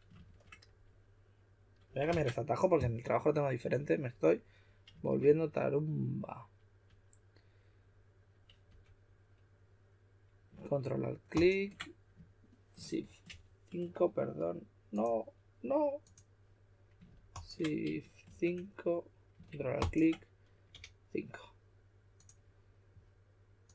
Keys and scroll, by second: 0.2 shift+5, 2.0 super+z, 5.0 shift+5, 8.6 typing, 13.2 shift+4, 18.2 shift+5, 20.7 typing.